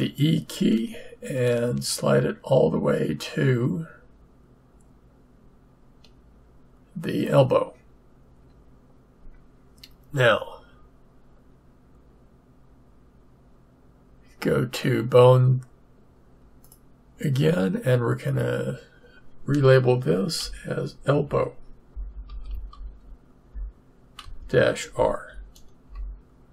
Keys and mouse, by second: 16.6-20.1 drag.